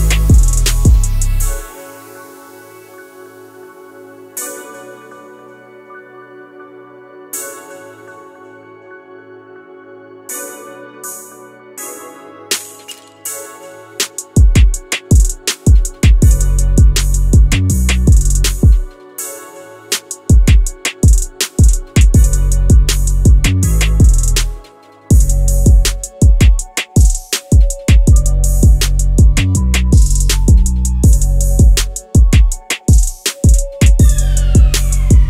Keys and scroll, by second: 16.2 Escape, 17.6 7, 17.8 Return, 19.1 0, 19.2 Return, 20.8 1, 21.2 Return, 25.3 1, 26.3 Return, 30.6 5, 31.5 Return, 31.9 0, 32.0 Return.